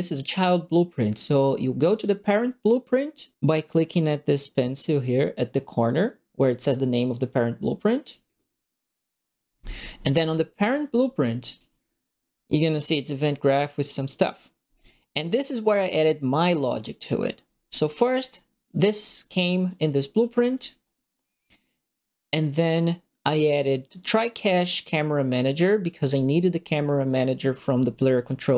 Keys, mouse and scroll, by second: 8.0 click, 11.4 click, 12.1 scroll down 2, 12.7 right click, 13.4 scroll up 2, 14.1 scroll down 2, 15.9 right click, 17.4 middle click, 17.5 scroll up 2, 17.9 click, 18.0 right click, 18.6 right click, 18.9 middle click, 19.6 click, 20.5 click, 20.8-23.6 right drag, 24.7 click.